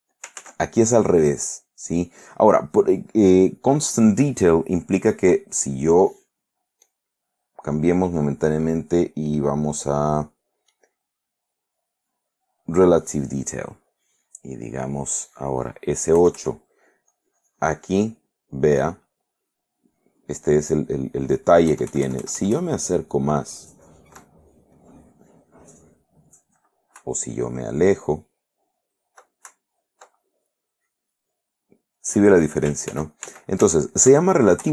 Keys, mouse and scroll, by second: 0.6 ctrl+z, 7.0 click, 10.9 click, 12.8 click, 16.3 KP_Add, 17.3 click, 21.9 KP_Add, 24.9-26.3 drag, 27.1 KP_Subtract, 30.7 click, 33.1 ctrl+z.